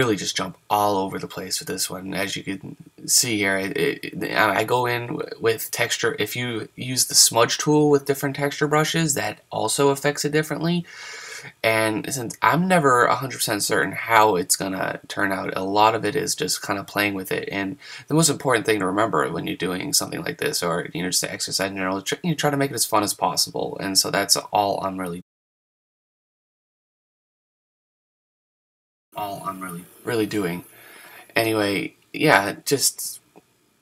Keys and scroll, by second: 16.2 super+z, 17.5 super+z, 17.9 super+z.